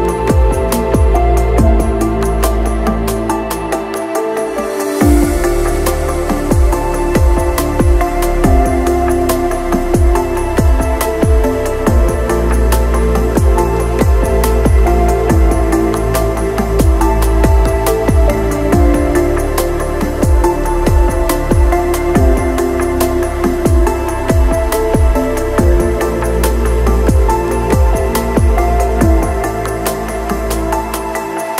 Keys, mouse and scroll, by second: 0.0 shift+click, 0.4 middle click, 0.8 click, 1.3 click, 1.3 s, 2.2 alt+d, 3.3 Delete, 4.0 middle click, 4.1 shift+click, 4.5 s, 4.9 s, 5.6 shift+middle click, 5.8 click, 6.2 click, 7.2 click, 8.4 click, 9.9 shift+middle click, 10.0 click, 10.6 shift+middle click, 11.8 middle click, 12.2 click, 12.3 shift+s, 12.7 g, 12.9 click, 13.6 click, 13.7 g, 14.3 click, 14.8 click, 15.1 alt+d, 15.4 click, 17.1 click, 17.3 click, 17.8 middle click, 18.7 middle click, 20.1 Delete, 20.3 shift+click, 20.8 Delete, 20.9 middle click, 21.1 click, 21.4 Delete, 21.7 click, 21.8 KP_Decimal, 21.9 KP_Decimal, 22.1 click, 22.3 click, 22.8 KP_Divide, 23.0 click, 23.2 Delete, 23.5 middle click, 24.1 click, 25.2 click, 25.8 click, 26.7 click, 27.3 shift+click, 28.1 scroll, 28.1 click, 28.8 ctrl+click, 29.0 s, 29.5 click, 29.8 click, 30.4 click, 31.0 alt+d, 31.3 click.